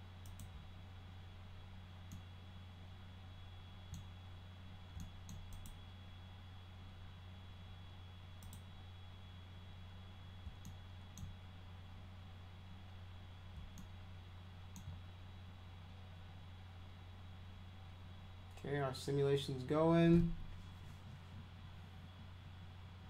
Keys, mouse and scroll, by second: 0.2 click, 2.1-3.9 alt+middle drag, 5.0 alt+middle click, 5.5 click, 8.4 click, 10.6-11.1 alt+middle drag, 13.8 alt+middle click.